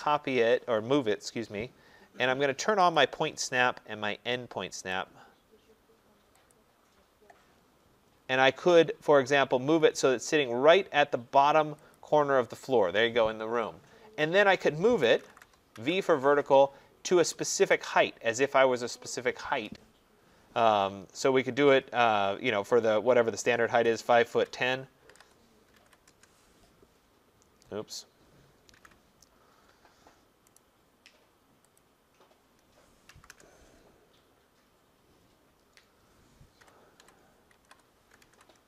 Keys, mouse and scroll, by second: 3.0 click, 4.9 click, 6.5 click, 8.1-8.4 middle click, 8.3 middle click, 8.3 middle click, 11.9 click, 14.8-15.9 typing, 17.7 click, 23.8-26.2 typing, 28.7 ctrl+z, 30.6 right click, 31.8 click, 33.1 v, 33.3 Return, 36.3-38.6 typing.